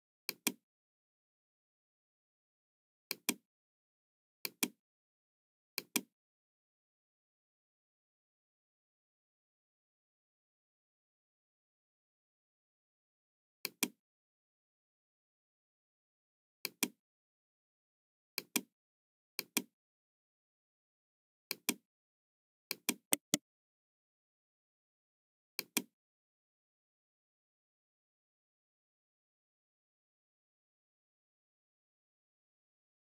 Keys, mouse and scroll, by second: 0.2 click, 3.1 click, 4.4 click, 5.7 click, 7.1 middle click, 7.5 scroll up 2, 8.1-8.4 scroll up 2, 8.9 scroll down 2, 13.5 click, 16.6 click, 18.2 click, 19.3 click, 21.4 click, 22.6 click, 23.0 right click, 25.5 click, 32.3 Return, 32.3 KP_2.